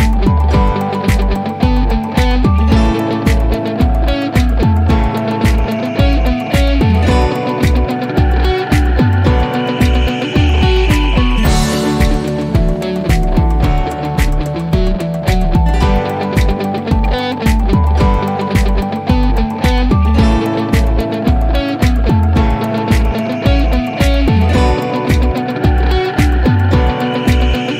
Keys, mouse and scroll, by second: 2.6 click, 5.5 click, 9.7-10.8 scroll down 1, 10.8-14.0 drag, 15.3-16.7 scroll down 1, 18.3 click, 20.0 scroll down 1, 21.9 scroll up 1, 23.1-24.5 scroll down 1, 25.1-25.9 drag.